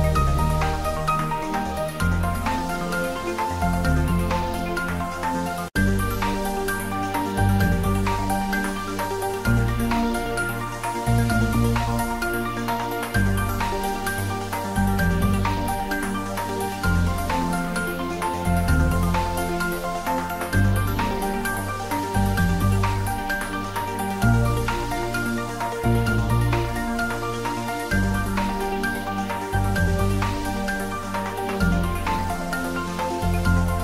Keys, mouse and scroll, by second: 0.2-1.1 typing, 0.2 click, 2.3 click, 2.5 ctrl+middle click, 3.3 r, 5.8 click, 8.0 click, 8.3 g, 10.6 click, 10.9 ctrl+s, 11.2 ctrl+middle click, 11.5 click, 11.8 ctrl+s, 11.9 ctrl+middle click, 12.5-13.9 middle drag, 13.9 click, 15.3 ctrl+s, 15.7 middle click, 15.7-17.4 middle drag, 17.4 click, 18.2 click, 18.6 ctrl+middle click, 18.9 click, 20.0 r, 22.3 click, 22.4 ctrl+z, 22.8-25.1 typing, 24.9 click, 25.4 middle click, 26.4 ctrl+z, 27.7 click, 28.4 middle click, 29.1-30.8 typing, 31.5 click, 31.7 ctrl+z, 32.0-33.0 typing.